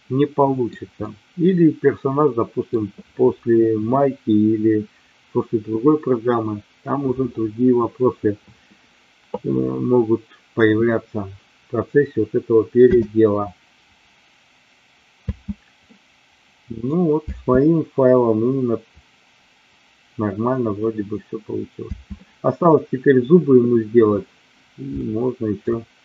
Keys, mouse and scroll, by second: 0.9-2.6 middle drag, 2.6 scroll down 1, 12.9 space, 15.8-16.9 middle drag, 21.8 space, 24.9 shift+middle click.